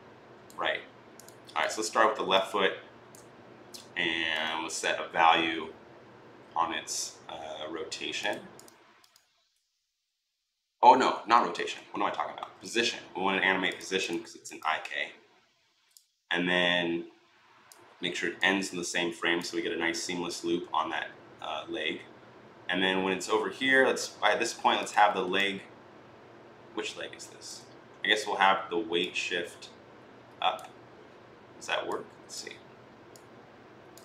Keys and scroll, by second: 11.5 ctrl+z, 11.9 ctrl+z, 12.2 ctrl+z.